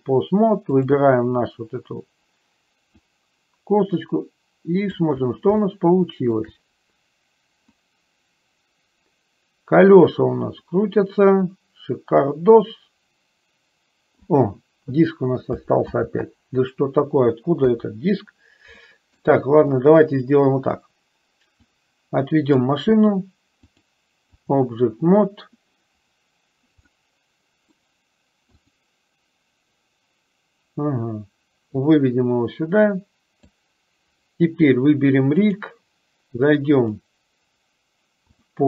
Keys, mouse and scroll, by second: 0.8 click, 3.2-5.1 drag, 5.8 shift+middle click, 7.9 click, 8.1-14.5 drag, 16.0 ctrl+z, 17.9 KP_3, 19.0 middle click, 20.0 middle click, 21.9-23.0 drag, 23.9 click, 27.1 middle click, 28.7 click, 32.1-33.9 drag, 35.6 click, 36.9-38.6 drag.